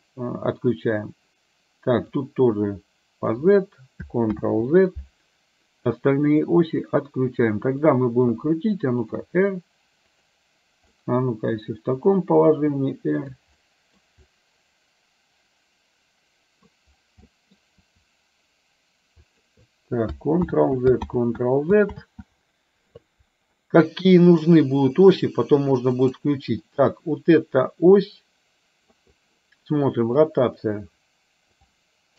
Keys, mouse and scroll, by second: 0.7 click, 2.3-3.5 drag, 4.4 ctrl+z, 5.9 click, 6.5 click, 9.2 r, 10.9 middle click, 11.7 r, 14.3-16.7 middle drag, 17.3 middle click, 17.9 r, 20.6 ctrl+z, 21.2 ctrl+z, 22.0 ctrl+z, 23.6 middle click, 26.0 click, 26.7-29.0 middle drag, 30.2-31.6 drag.